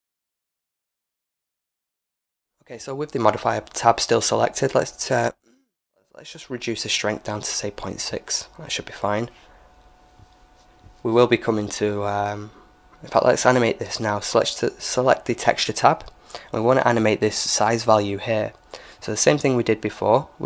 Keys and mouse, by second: 7.1-9.0 drag, 9.3-11.0 drag, 12.7-17.3 drag.